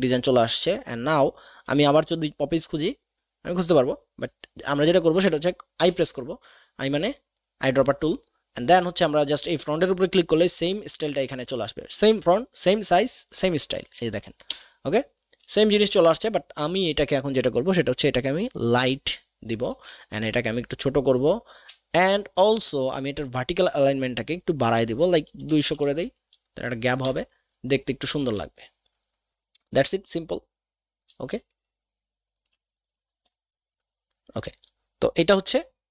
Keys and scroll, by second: 14.6 v, 25.4 KP_2, 25.5 KP_0, 25.6 KP_0, 25.8 Return.